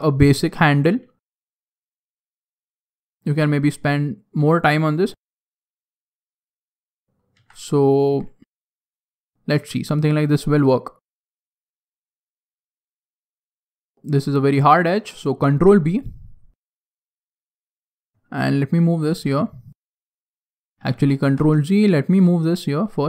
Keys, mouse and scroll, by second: 0.1 shift+middle click, 0.8 shift+middle click, 1.5 e, 2.6 e, 3.3 s, 4.6 s, 5.0 e, 6.2 s, 7.3 e, 7.8 click, 8.0 s, 9.5 g, 11.4 middle click, 12.7 middle click, 12.8 shift+middle click, 12.9 shift+middle click, 13.1 middle click, 14.0 alt+right click, 14.4 alt+right click, 15.4 ctrl+b, 17.9 click, 18.4 alt+right click, 19.4 click, 20.4 ctrl+z, 20.7 ctrl+z, 21.4 ctrl+z, 21.7 right click, 22.4 alt+right click.